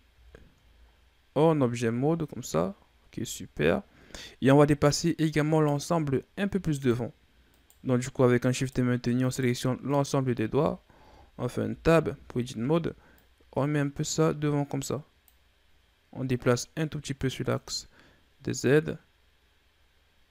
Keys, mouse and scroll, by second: 0.6-1.1 scroll down 3, 1.1-2.2 scroll down 7, 2.9-4.1 scroll up 7, 5.8 right click, 6.9 shift+right click, 7.8 shift+right click, 8.8 shift+right click, 9.5 shift+right click, 10.1 shift+right click, 11.3 Tab, 11.8 a, 12.2 a, 13.5-19.6 drag.